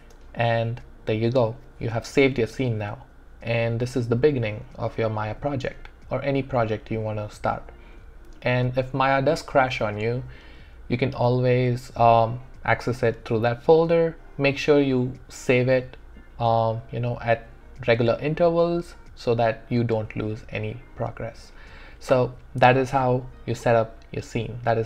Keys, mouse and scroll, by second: 0.0 space.